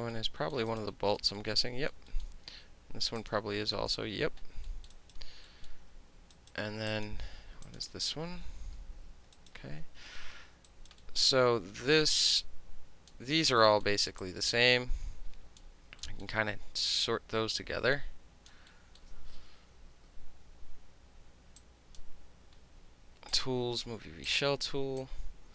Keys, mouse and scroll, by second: 0.1 alt+middle click, 0.7 alt+click, 0.9 alt+middle click, 1.4 alt+middle click, 2.2-3.2 alt+middle drag, 3.2 click, 3.3-4.7 middle drag, 4.9 alt+middle click, 5.0 alt+right click, 5.1 alt+middle click, 5.7 alt+middle click, 6.4 alt+right click, 6.5 alt+middle click, 6.9 click, 7.1 middle click, 7.7 click, 7.8 middle click, 8.3 middle click, 8.5 middle click, 8.8 f, 9.4 alt+click, 10.0 middle click, 10.7 alt+right click, 10.9 alt+middle click, 11.2 alt+middle click, 12.2-13.1 drag, 13.1-13.6 middle drag, 13.6 alt+scroll down 1, 13.8 alt+middle click, 14.2-15.6 drag, 15.6-16.0 alt+middle drag, 16.0 alt+scroll down 1, 16.2-17.0 alt+middle drag, 17.0-18.5 drag, 18.7 alt+middle click, 20.1 w, 21.6 click, 23.3 click, 24.3 click, 25.0-25.5 drag.